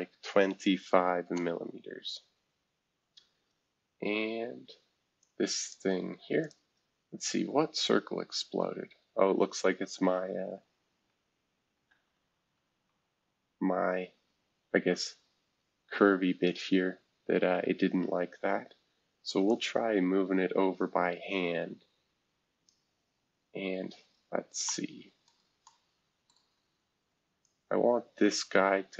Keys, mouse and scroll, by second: 0.0-0.6 typing, 1.2 Return, 2.1-2.8 scroll down 6, 3.7-4.3 scroll up 1, 3.7 typing, 4.3-5.2 scroll up 1, 5.2 click, 6.4 click, 6.7-7.4 scroll down 1, 7.4-8.0 scroll down 1, 8.0-8.8 scroll up 1, 8.8 scroll up 1, 8.9 scroll down 1, 8.9 typing, 9.6 scroll down 2, 10.3 scroll up 2, 11.7 ctrl+z, 12.9 scroll up 1, 13.7 scroll up 1, 16.2 scroll down 1, 19.5-22.7 drag, 23.2 scroll down 2, 23.7-24.6 scroll up 2, 24.6 scroll up 1, 25.2 shift+middle click, 26.3-27.4 shift+middle drag, 27.4-28.9 drag.